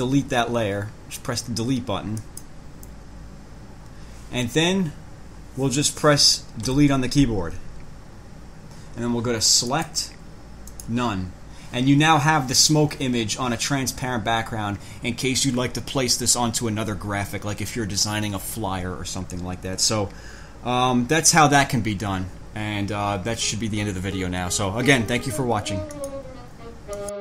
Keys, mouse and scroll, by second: 2.4 click, 6.9 Delete, 9.9 click, 10.9 click, 26.1 click, 27.1 click.